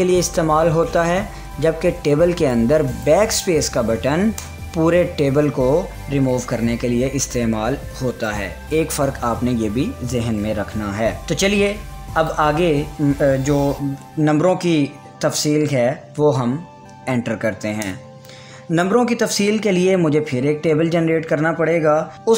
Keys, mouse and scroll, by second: 3.5 click, 6.7 ctrl+z, 11.4 click, 18.3 Return.